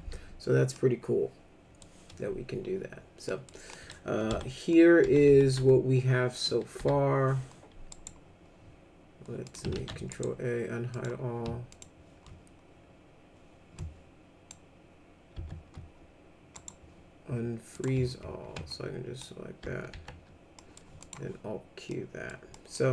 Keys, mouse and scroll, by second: 0.7-1.8 middle drag, 3.3 middle click, 3.7 middle click, 4.3 F3, 5.0 F3, 5.3 F3, 5.6 F4, 6.8 F4, 7.9 right click, 9.5 click, 9.7 ctrl+a, 10.1 right click, 10.9 click, 11.7 ctrl+click, 13.8 ctrl+click, 15.3 ctrl+z, 16.5 right click, 17.7 click, 18.7-19.2 ctrl+drag, 19.9 alt+q, 20.6 middle click, 21.0 click, 21.9 middle click, 22.5 middle click.